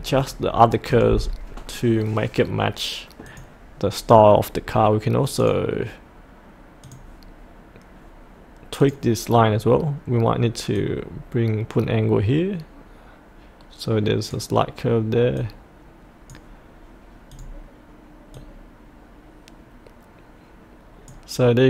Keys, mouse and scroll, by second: 3.2-21.6 drag.